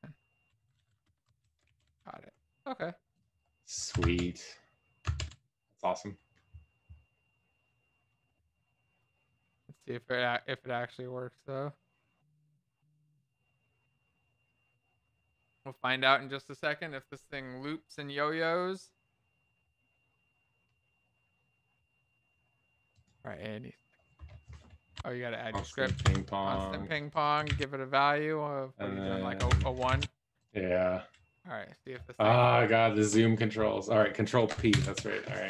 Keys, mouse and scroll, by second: 0.0 BackSpace, 1.2 Down, 1.2 Right.